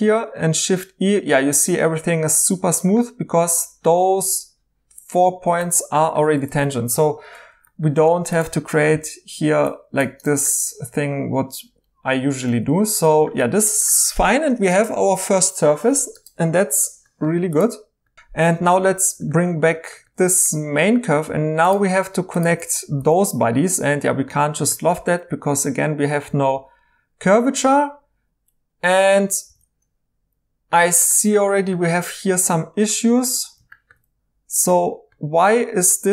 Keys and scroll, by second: 5.5 e, 6.3 ctrl+z, 6.4 ctrl+z, 7.9 2, 8.9 typing, 12.6 ctrl+z, 18.7 alt+h, 23.0 i, 29.4 ctrl+z.